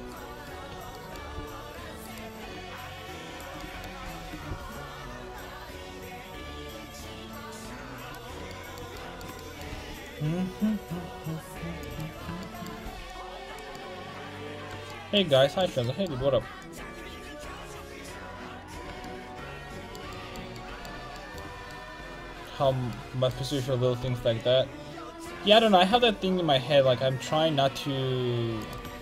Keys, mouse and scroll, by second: 0.7 a, 1.4 c, 2.1 click, 3.6-7.2 middle drag, 4.1 ctrl+x, 4.5 c, 9.7 c, 12.8 c, 16.2 c, 19.2 middle click, 20.1 middle click, 21.7 middle click, 24.0 c.